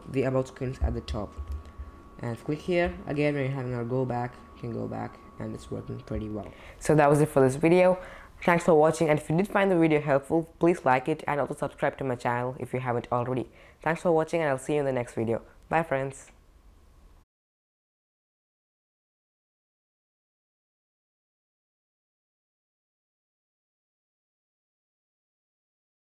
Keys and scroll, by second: 1.3 super+Tab.